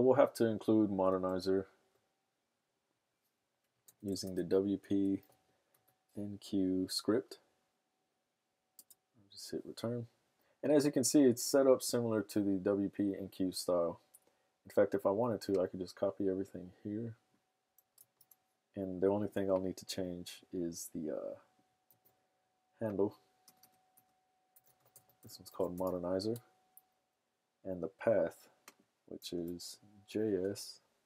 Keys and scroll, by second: 3.9-6.2 typing, 6.5 Down, 6.7 Down, 18.0 super+c, 21.9 super+v, 23.6-26.2 typing, 29.2-31.0 typing.